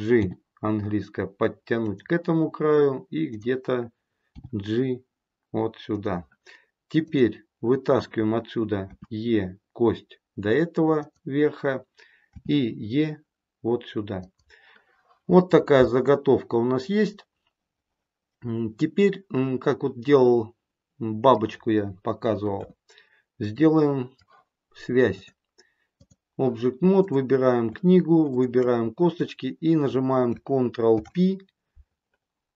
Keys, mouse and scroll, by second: 0.1 g, 3.2 click, 4.2 g, 7.0 click, 8.8 e, 18.2 middle click, 19.9 middle click, 22.5 KP_1, 23.5 middle click, 25.0 click, 26.9 click, 28.2 shift+click, 30.8 ctrl+p.